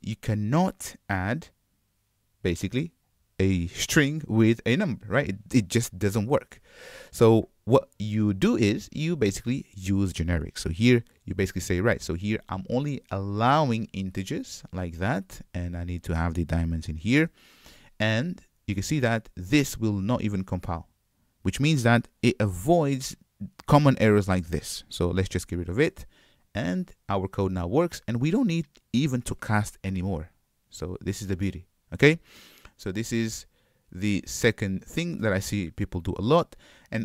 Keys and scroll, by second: 13.9 Return, 25.7 super+y, 26.5 Escape.